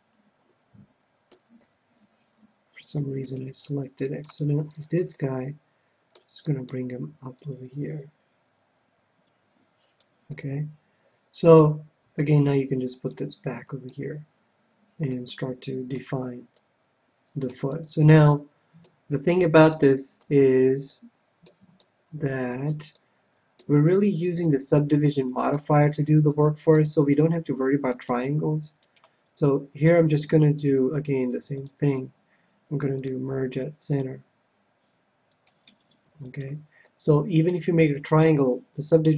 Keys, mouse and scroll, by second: 1.5 KP_3, 4.1-5.7 right drag, 4.6-8.1 middle drag, 7.3-9.1 drag, 10.3-11.8 middle drag, 12.9-14.4 drag, 13.8-19.4 middle drag, 19.6-28.2 middle drag, 27.9-30.4 right drag, 31.5-34.7 drag, 35.5-37.9 right drag, 36.8-38.4 middle drag.